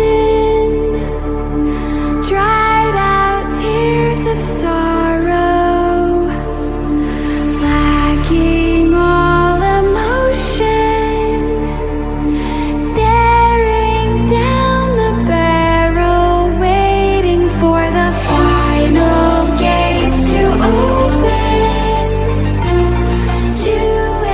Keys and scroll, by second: 0.2 ctrl+0, 3.0 ctrl+g, 13.9 ctrl+g, 14.8 ctrl+x, 15.5 ctrl+0, 16.2 ctrl+v, 23.5 F1.